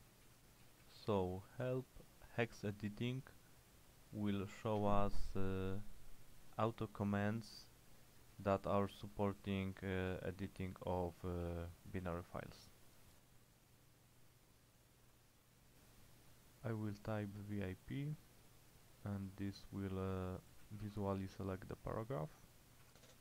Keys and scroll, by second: 0.0-2.2 typing, 4.9 Return, 8.4 shift+], 8.8 shift+], 9.1 shift+], 9.5 shift+], 11.1 k, 11.5 k, 12.1 j, 20.4-21.4 typing, 22.9 y.